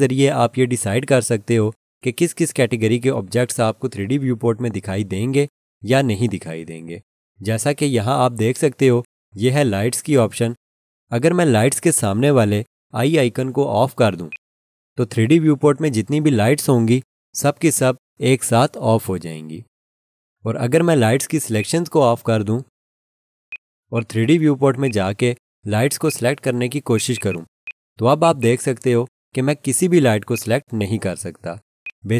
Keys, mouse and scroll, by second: 14.3 click, 21.6 click, 23.9 double click, 27.1 double click.